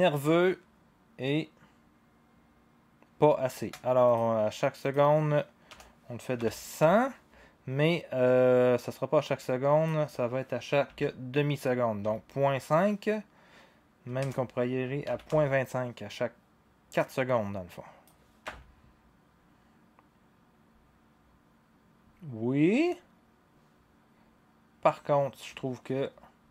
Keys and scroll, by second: 5.7-8.4 typing, 12.0 5, 14.2-15.3 typing, 18.4 0.